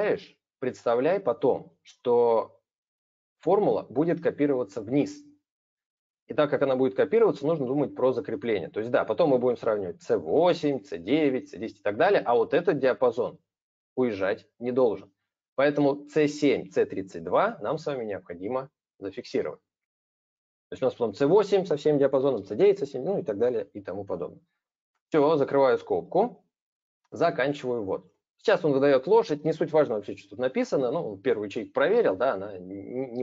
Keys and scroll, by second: 27.3 ctrl+Return.